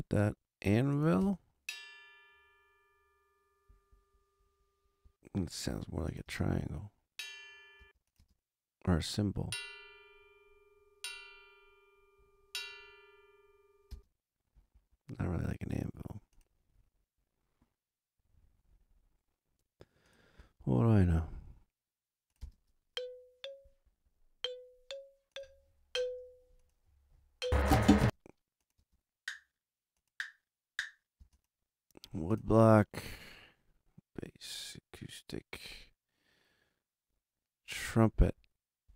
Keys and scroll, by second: 1.2 space, 5.0 space, 7.7 space, 13.9 space, 22.3 space, 27.9 space.